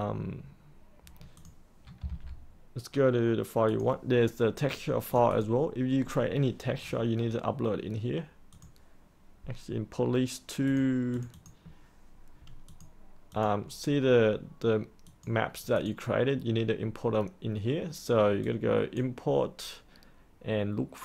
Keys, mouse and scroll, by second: 1.7-2.5 typing, 3.6 click, 8.5-21.0 drag.